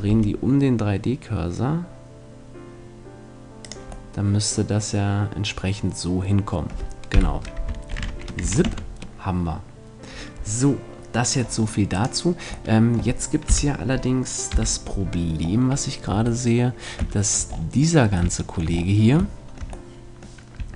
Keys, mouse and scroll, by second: 0.1 r, 3.7-5.5 drag, 4.1-5.1 middle drag, 5.5 middle click, 7.1 KP_7, 7.9 ctrl+z, 8.4 a, 8.7 Tab, 8.9-10.7 middle drag, 11.4 middle click, 12.1 right click, 12.7-14.5 middle drag, 13.5 KP_1, 14.5 KP_3, 15.1-17.3 middle drag, 16.1 Tab.